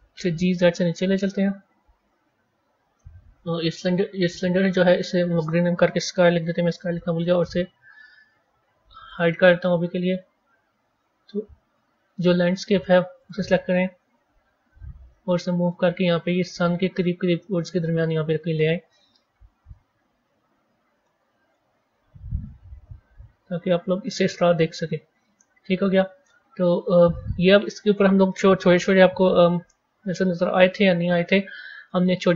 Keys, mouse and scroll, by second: 1.9 KP_1, 4.2 click, 4.6 click, 4.8-7.8 drag, 8.0-9.0 scroll down 4, 9.0 click, 10.0-12.4 scroll down 4, 13.1 click, 14.1 g, 19.0 KP_1, 19.5 KP_1, 20.9-21.7 middle drag, 21.7 KP_1, 23.8-24.8 scroll up 6, 24.8-27.8 middle drag.